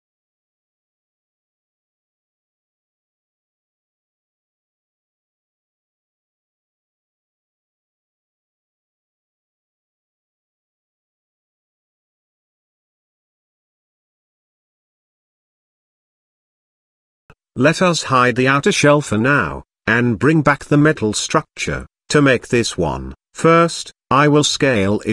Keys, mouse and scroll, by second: 0.5-1.6 drag, 2.5-4.6 drag, 7.5 ctrl+z, 7.9 ctrl+z, 8.2 ctrl+z, 9.2-10.6 middle drag, 12.2 click, 13.7-14.8 middle drag, 18.4 click, 19.5 click, 20.2-20.6 middle drag, 21.1 click, 23.2 s.